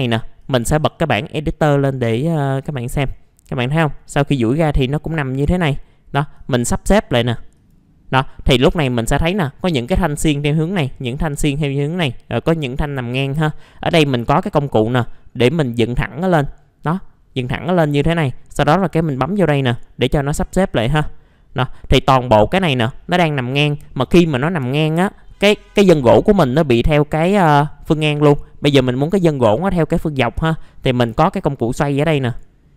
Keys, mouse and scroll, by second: 3.0 middle click, 3.1-3.4 scroll down 1, 4.9-6.4 scroll up 1, 6.4-16.6 drag, 21.0-21.6 scroll up 1, 21.6-22.6 middle drag, 23.7 scroll down 1, 24.0 middle click, 24.5 scroll down 1, 24.6 F2, 25.1 middle click, 25.3-27.4 scroll down 1, 32.2 click.